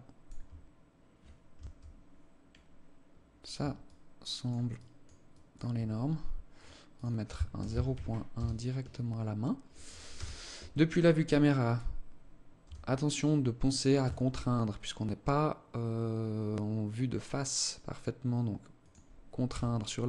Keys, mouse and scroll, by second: 0.1-0.4 scroll down 4, 0.4 scroll up 2, 0.7 scroll down 1, 1.1 KP_0, 3.5 alt+click, 4.3 alt+click, 4.9 alt+click, 6.1 click, 6.6 click, 9.7 KP_0, 10.7-11.1 scroll up 2, 11.1 scroll down 1, 12.2 g, 19.1 g.